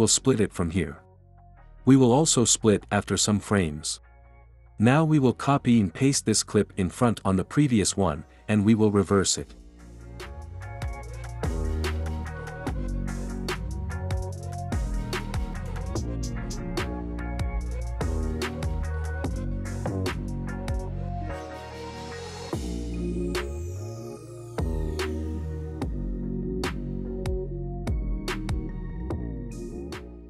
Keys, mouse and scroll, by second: 2.9 ctrl+b, 3.8 click, 5.0 ctrl+c, 6.1 ctrl+v, 7.0-8.0 drag, 9.9-10.9 right drag, 11.3-12.3 drag, 12.4 click, 20.8 click, 23.1 click, 23.6 space, 28.1 space, 28.8 click, 29.3 ctrl+c.